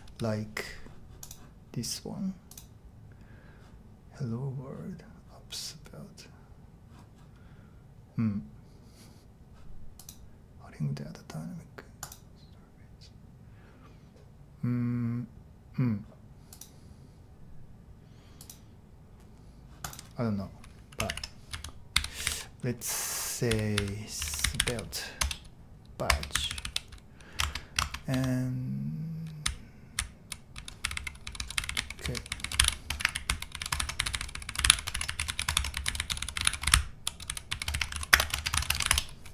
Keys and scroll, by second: 20.8-26.6 typing, 27.8 shift+Tab, 29.2-38.8 typing, 38.9 Return.